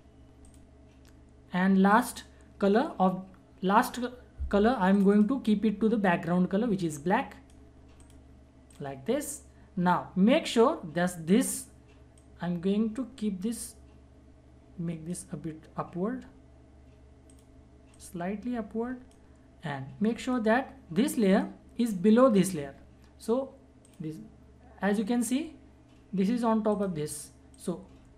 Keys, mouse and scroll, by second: 4.9 click, 12.1 click, 12.2-20.2 drag, 23.8 click, 26.7 click.